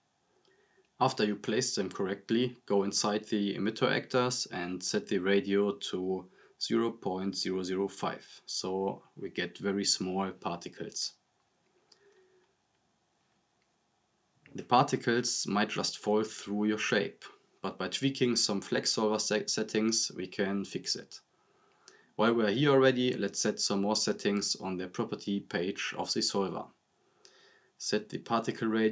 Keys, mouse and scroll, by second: 1.8-2.7 drag, 4.1 scroll down 1, 4.8-6.0 drag, 7.6 scroll down 1, 8.2-9.5 drag, 11.4 scroll down 1, 12.0 click, 15.3-17.2 drag, 19.3-19.8 drag, 23.8 click.